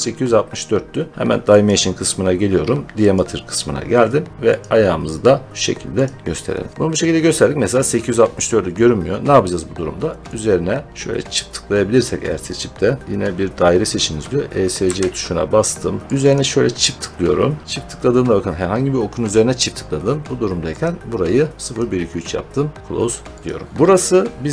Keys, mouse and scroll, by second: 1.5 click, 3.1 click, 4.5 click, 5.9 click, 9.2 scroll, 10.1 scroll, 10.2 click, 10.9 click, 13.0 click, 14.7 Escape, 16.2 click, 20.7 click, 21.7 click, 22.8 click, 23.4 click, 23.7 middle click, 23.7 scroll.